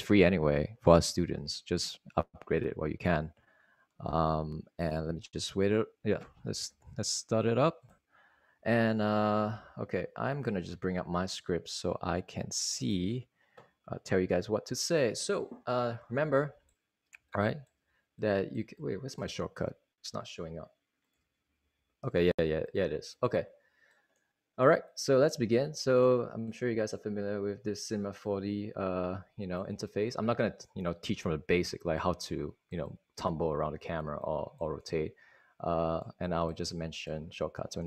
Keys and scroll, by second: 9.8 super+Right, 21.8 super+Tab, 22.9 super+Tab.